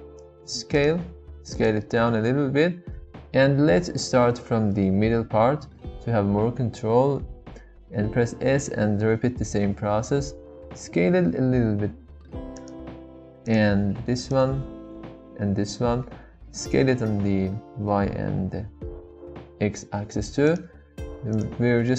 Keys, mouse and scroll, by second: 0.7 click, 7.4 s, 8.5 shift+z, 12.5 click, 15.1 s, 16.1 shift+z, 20.4 click, 21.3 alt+click.